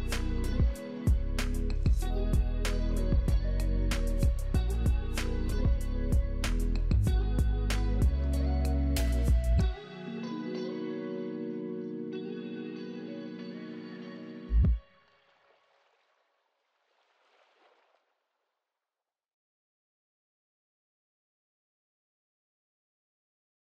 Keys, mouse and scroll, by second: 0.0 middle click, 0.1 middle click, 9.4 right click, 22.6 right click.